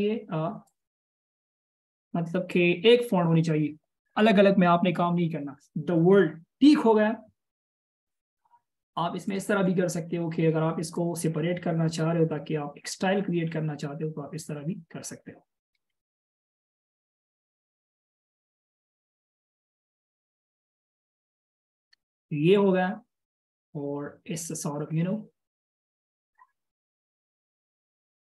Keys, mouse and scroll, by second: 9.9 right click, 16.2 alt+shift+scroll up 1, 23.1 double click, 24.5-25.0 alt+shift+scroll down 1, 25.0 alt+shift+scroll up 1.